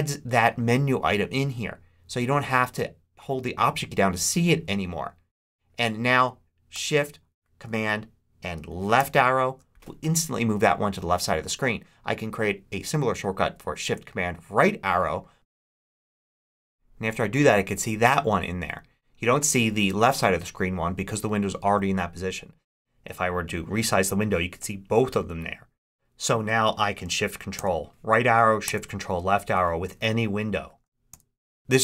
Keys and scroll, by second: 8.9 shift+super+Left, 27.5 shift+super+Right, 28.5 shift+super+Left, 31.0 shift+super+Right.